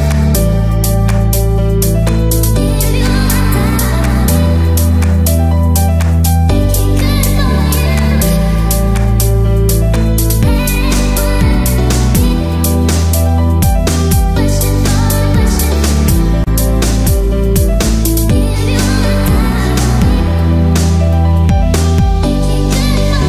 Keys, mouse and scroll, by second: 0.0 shift+middle click, 0.0 shift+click, 1.0 click, 1.0 middle click, 1.0 scroll down 2, 1.2 middle click, 1.4 alt+click, 1.5 click.